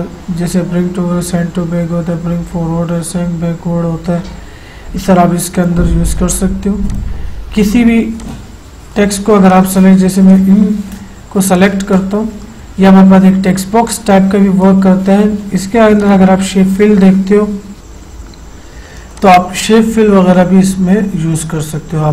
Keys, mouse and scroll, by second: 5.6 click, 16.0 click, 17.9 F8, 19.3 click.